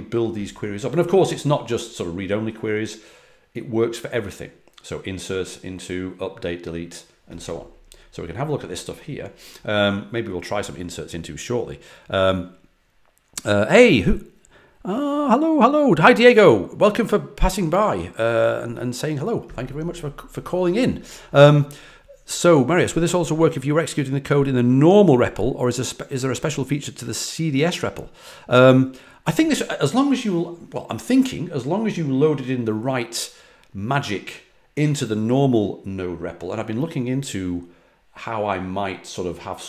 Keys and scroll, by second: 7.9 typing.